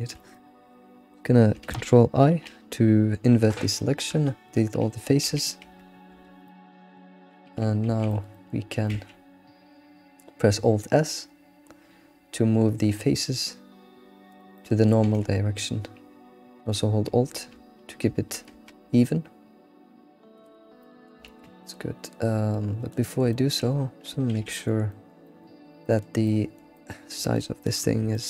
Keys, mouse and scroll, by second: 2.3 ctrl+i, 3.6 Delete, 5.2 a, 5.6 Tab, 5.9-6.2 scroll down 3, 6.2 alt+q, 6.5-7.5 middle drag, 7.5 Tab, 7.8 a, 8.1 alt+middle click, 8.3 alt+middle click, 8.8 a, 8.9 alt+s, 14.5 middle click, 15.1 alt+s, 20.6 scroll down 1, 20.8 middle click, 21.2 ctrl+z, 21.6-23.7 middle drag, 23.7-24.1 scroll down 4, 24.3 alt+x, 24.7 alt+middle click, 25.2 middle click, 26.3 middle click, 27.2 shift+middle drag, 27.6-28.1 scroll up 7, 28.1-28.2 shift+middle drag.